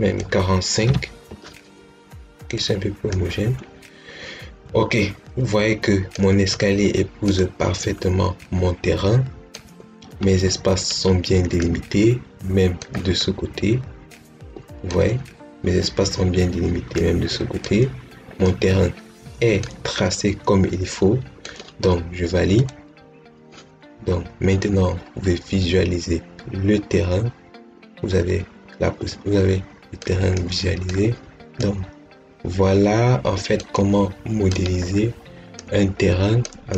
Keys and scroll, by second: 0.7 5.